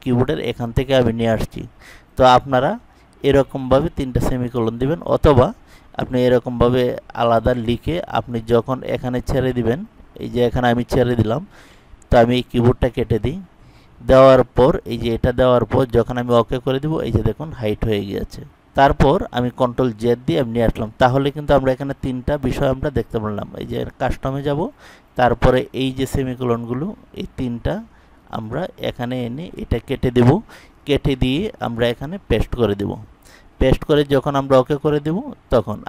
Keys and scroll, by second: 27.5 typing.